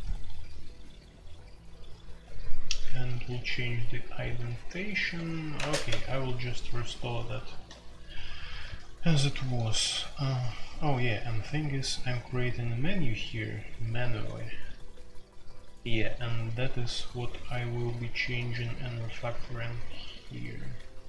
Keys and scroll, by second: 3.3-7.2 typing, 8.4-12.8 typing, 17.3 typing, 18.3 typing, 19.7-20.2 typing.